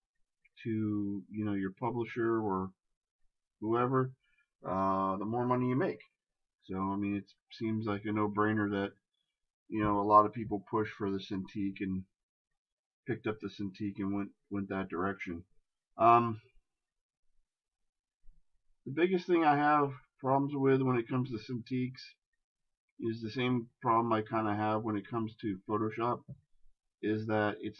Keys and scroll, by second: 6.7 shift+space, 13.5 shift+space, 15.4 ctrl+KP_Add.